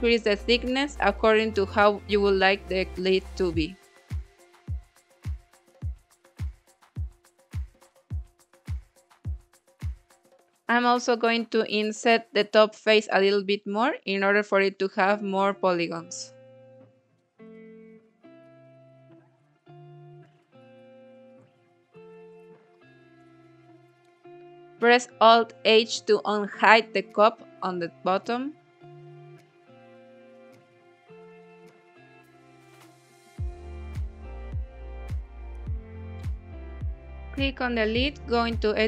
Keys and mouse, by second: 2.1-4.3 drag, 5.3 click, 6.1-6.9 middle drag, 6.9 Tab, 7.6 click, 8.7 click, 9.4 click, 10.2 middle click, 10.6 Tab, 11.5 3, 11.9 click, 12.9 i, 15.0 click, 15.4 i, 16.3 click, 16.5 i, 17.7 click, 18.5 Tab, 18.7-19.6 middle drag, 21.6 click, 22.0-25.1 middle drag, 27.9 middle click, 28.5-29.1 shift+middle drag, 29.4 middle click, 30.3 alt+h, 31.3-34.6 middle drag, 35.6 KP_1, 36.4 click, 36.9 click, 38.1 Tab, 38.5 middle click.